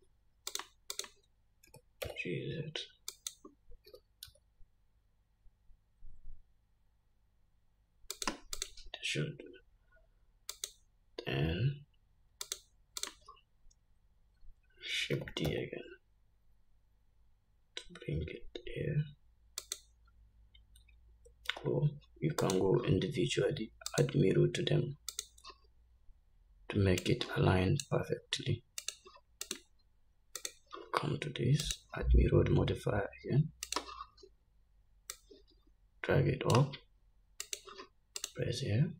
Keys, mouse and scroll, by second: 0.7 shift+click, 1.2 shift+click, 2.0 g, 4.1 r, 8.8 click, 10.8 click, 12.7 shift+click, 13.3 shift+click, 15.4 shift+d, 21.7 ctrl+z, 22.6 click, 24.2-28.1 drag, 29.1 click, 30.7 click, 31.9-36.8 drag, 37.7 click.